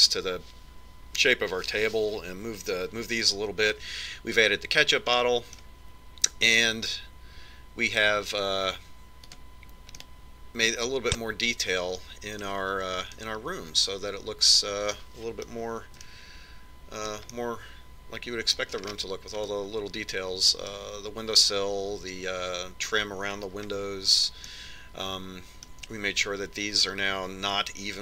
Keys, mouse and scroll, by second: 6.9-8.7 middle drag, 11.2 click, 11.8-13.5 middle drag, 14.9-16.6 middle drag, 16.7 middle click, 17.9-22.9 middle drag, 23.2 middle click, 25.3-28.0 middle drag.